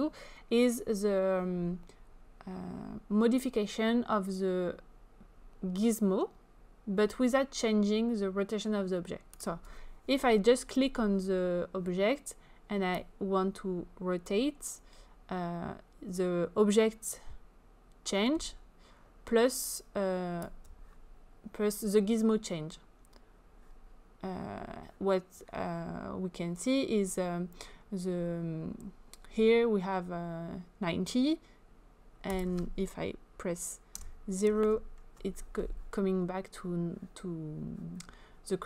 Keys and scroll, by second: 34.0 0, 34.7 Return.